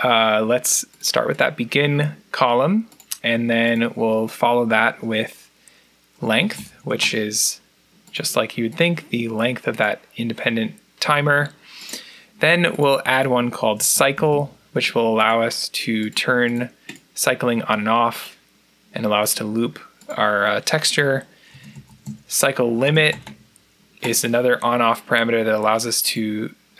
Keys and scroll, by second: 5.9-7.4 typing, 13.4-14.6 typing, 21.1-23.7 typing.